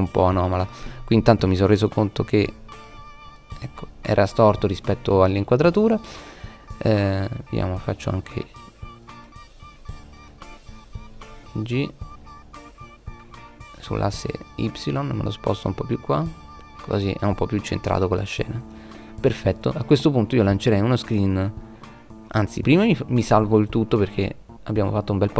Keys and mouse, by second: 6.6 g, 9.3 right click, 9.6 g, 16.6 click, 17.9-19.7 drag, 19.7-22.8 middle drag, 22.8-24.4 drag.